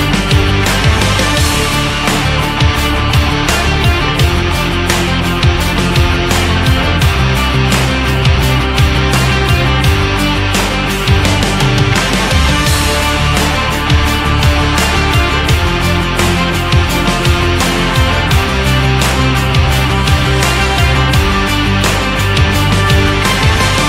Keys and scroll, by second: 2.9 ctrl+=, 13.8 Right, 19.5 Right.